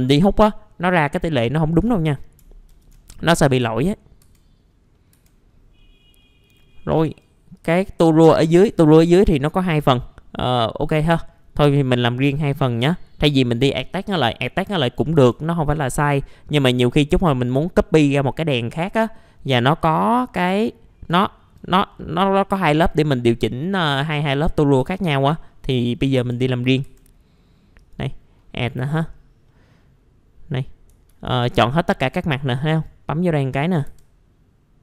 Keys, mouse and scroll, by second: 2.7 ctrl+shift+g, 3.5 middle click, 4.1 scroll down 1, 4.6 F4, 4.9 middle click, 5.1-5.8 scroll down 2, 5.1 F4, 5.8 middle click, 7.5 click, 8.6 F4, 10.8-11.9 scroll down 1, 11.9-12.8 scroll up 1, 15.1 F4, 16.1-16.5 scroll down 1, 16.5 middle click, 16.9 alt+middle click, 17.3-17.8 scroll down 1, 19.5 scroll up 1, 19.8 alt+middle click, 21.2 alt+middle click, 22.8 middle click, 24.6 scroll up 1, 24.8 F4, 26.0 scroll up 1, 26.1 F4, 26.7 scroll up 1, 26.8 F4, 27.8 click, 29.5-30.7 middle drag, 31.1 ctrl+a, 32.0 F2, 32.7 click, 33.5-33.8 scroll up 1, 33.8 F2.